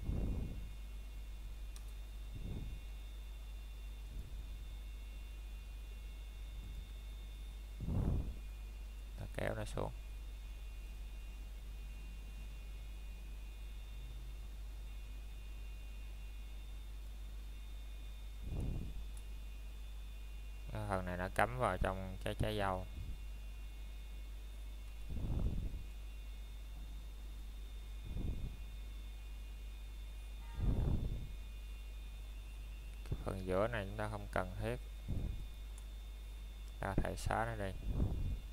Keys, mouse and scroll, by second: 3.1 ctrl+BackSpace, 5.6 click, 8.4 alt+click, 8.8 scroll down 1, 9.0 middle click, 10.6 click, 11.8-13.2 scroll up 1, 19.7 middle click, 21.4-21.9 scroll up 1, 21.9 middle click, 22.5 scroll up 1, 27.2 o, 28.4 click, 30.2 scroll down 1, 30.6 middle click, 31.9 scroll up 1, 33.2 middle click, 34.4 scroll up 1, 35.0 middle click, 36.8 alt+shift+click, 37.4 middle click, 37.7 scroll down 1, 38.0 middle click.